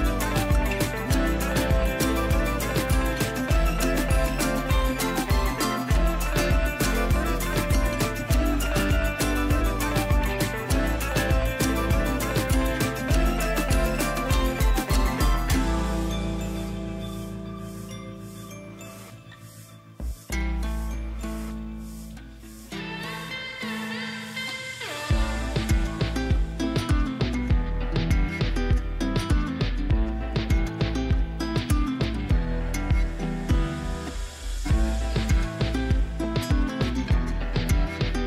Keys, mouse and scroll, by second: 0.3 Left, 1.0-2.5 click, 3.5 b, 4.6 alt+click, 5.4-6.1 [, 6.4 ], 7.0-7.6 drag, 12.0 space, 12.2 right click, 12.4 click, 12.8 ctrl+space, 15.0-15.7 space, 17.7 b, 18.5 click, 19.3-20.6 typing, 20.8 click, 27.5 w, 27.8 click, 34.7 shift+F6, 36.9 ctrl+l.